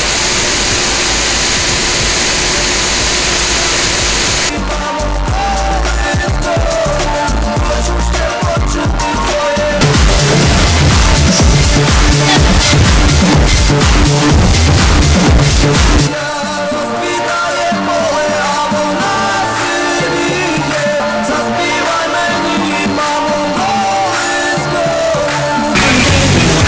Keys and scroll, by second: 4.7 Page_Down, 16.1 Page_Down.